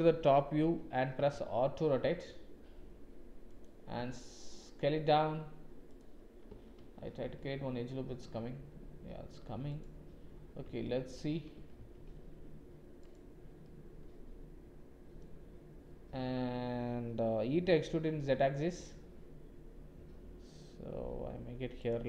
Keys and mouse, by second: 0.0 KP_7, 1.1 r, 3.9 s, 6.7 ctrl+r, 10.8 shift+click, 11.7 ctrl+r, 13.6 click, 17.5 e.